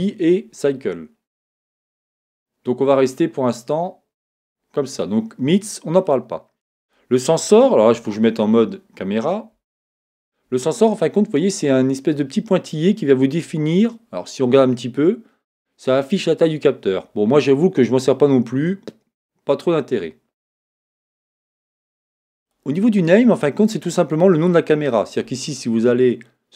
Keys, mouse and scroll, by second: 4.2-8.9 drag, 7.9 KP_0, 9.7 KP_0, 22.4-24.3 drag.